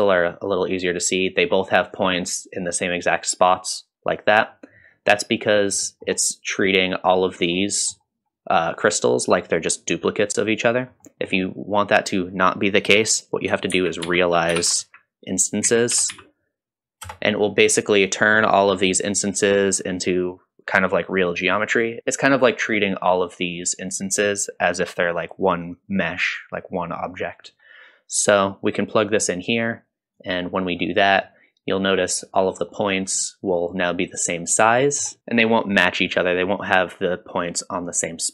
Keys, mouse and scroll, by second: 0.0 shift+middle click, 5.8 middle click, 7.6 middle click, 11.0 middle click, 13.7 shift+a, 19.8 typing, 28.3-29.8 drag, 30.1 click, 31.2-31.7 middle drag, 32.5 scroll down 2, 32.7 middle drag, 33.5 middle drag, 34.7-35.1 middle drag, 35.2 click, 35.2 scroll up 1.